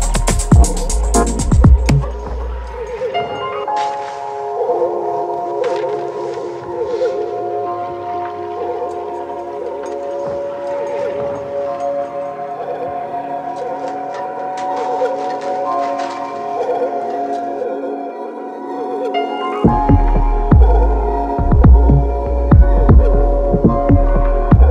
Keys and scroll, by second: 2.5 6, 2.6 Return, 4.2 4, 4.3 ', 4.5 3, 4.7 Return, 7.6 shift+c, 9.9 x, 18.8 0, 19.0 Return, 19.9 x, 22.2 ', 22.3 3, 22.4 Return, 24.5 x.